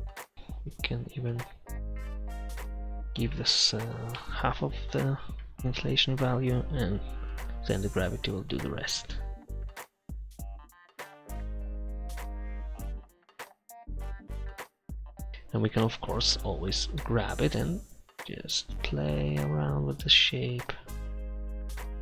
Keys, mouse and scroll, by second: 2.3-3.9 drag, 10.7 middle click, 11.6 click, 12.9 middle click, 16.2-18.0 drag, 17.4 middle click, 21.5 middle click.